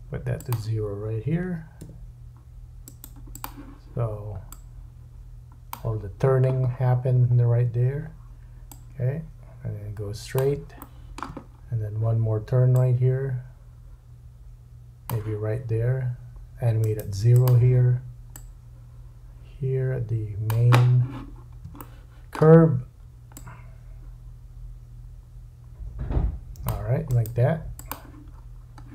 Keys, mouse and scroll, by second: 2.8-6.8 middle drag, 2.8-6.8 right drag, 6.7-7.5 scroll down 6, 8.7 click, 10.8 shift+middle click, 11.4 scroll up 4, 12.8 click, 12.8-14.6 shift+scroll up 4, 16.8 right click, 18.4 click, 21.3-21.6 scroll up 2, 21.8 shift+middle click, 23.3 click, 27.1 right click, 28.3-28.9 scroll down 5.